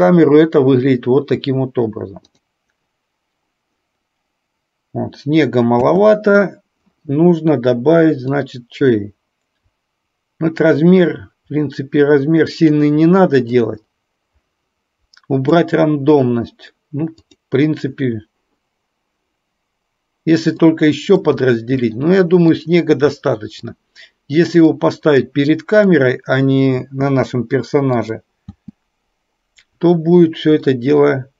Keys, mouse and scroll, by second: 6.0 space, 8.4-12.8 drag, 13.5-15.5 drag, 17.3 click, 20.8-21.4 middle drag, 22.0-22.8 middle drag, 23.3-23.9 middle drag, 24.8-26.0 drag, 26.9 space, 28.2 click, 30.8-31.3 middle drag.